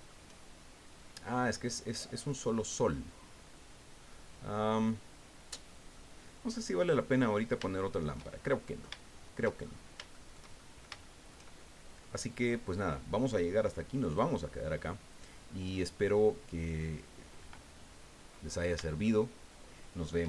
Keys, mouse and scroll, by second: 0.5-0.9 shift+scroll down 3, 1.9 right click, 2.3-6.1 middle drag, 7.3-7.7 scroll up 3, 7.7 shift+middle click, 8.7 shift+click, 9.6 shift+scroll up 2, 10.1 shift+click, 10.6 shift+click, 11.6-13.1 shift+middle drag, 14.0 click, 15.1 click, 19.1-20.2 shift+middle drag.